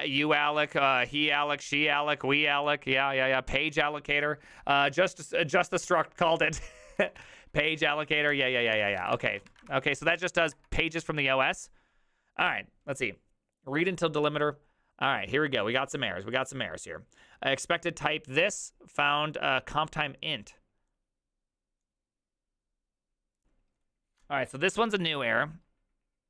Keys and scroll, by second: 5.9 alt+{, 6.7-10.0 typing, 8.3 ctrl+c, 10.1 Up, 10.5 Return.